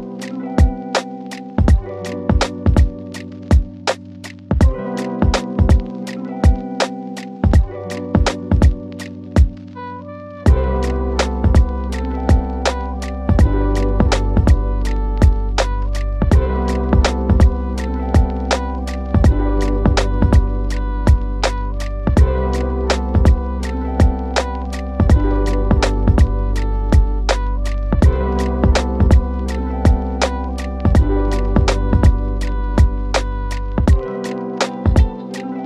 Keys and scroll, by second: 7.9 Delete, 17.3 F4.